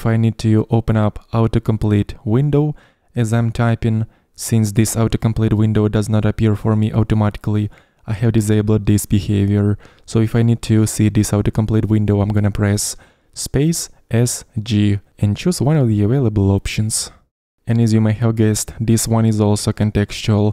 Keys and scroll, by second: 13.9-14.7 typing.